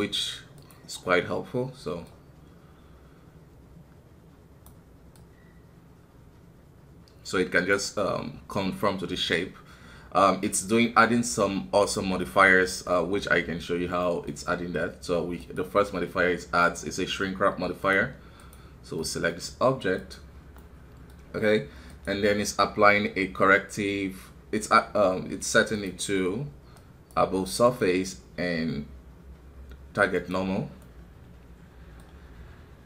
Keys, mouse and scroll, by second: 12.2-15.4 middle drag, 15.4-19.0 drag, 19.0-21.9 middle drag, 21.9-24.9 drag, 25.7-30.6 drag, 30.8-32.8 middle drag.